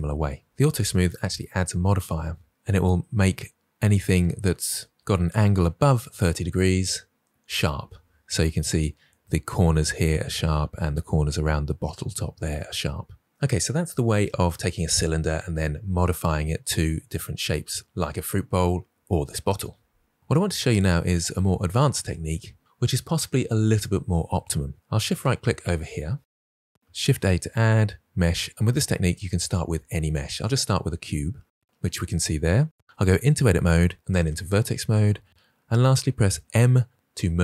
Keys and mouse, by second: 25.0 shift+right click, 26.9 shift+a, 33.2 Tab, 36.4 m.